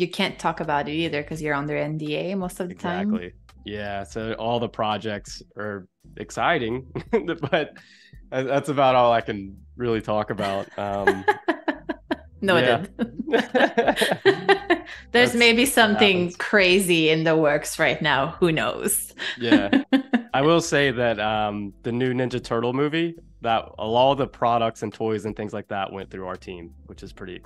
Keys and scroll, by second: 1.3 =, 2.2 a, 10.9 z, 11.4 space, 11.8 a, 15.6 super+[, 16.9 super+-, 18.0 super+z, 18.6 space, 19.6 z, 20.3 a.